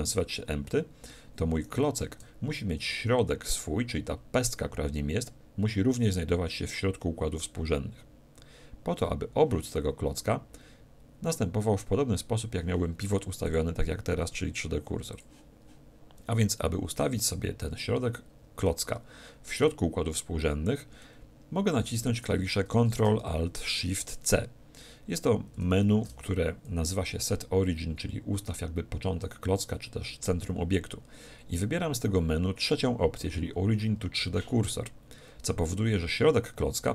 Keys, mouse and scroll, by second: 1.6-3.4 right drag, 4.3-6.2 middle drag, 13.4-15.2 drag, 21.0-23.0 middle drag.